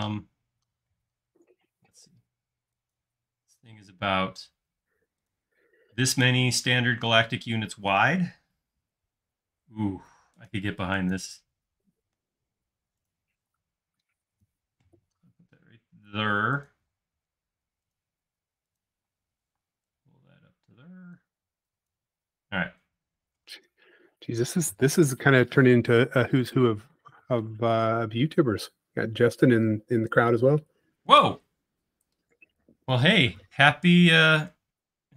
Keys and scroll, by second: 1.2 l, 5.7 space, 6.7 m, 8.0 q, 9.0 Left, 13.4 m, 17.0 l, 19.2 space, 19.6 p, 21.2 typing, 22.5 space, 25.6 m, 26.1 space, 28.5 typing.